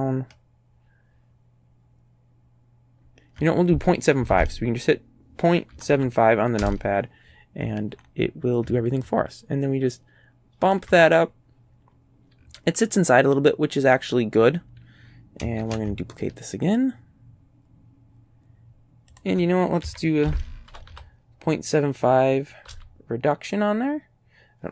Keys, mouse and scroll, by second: 4.2 KP_Decimal, 5.8 KP_7, 6.0 KP_5, 6.7 KP_Enter, 7.6-8.3 scroll up 4, 9.1-10.9 ctrl+drag, 11.2-11.9 ctrl+scroll down 3, 15.6 shift+d, 19.2 ctrl+click, 19.9 ctrl+s, 20.2 KP_Decimal, 20.7 KP_7, 20.9 KP_5, 22.7 KP_5.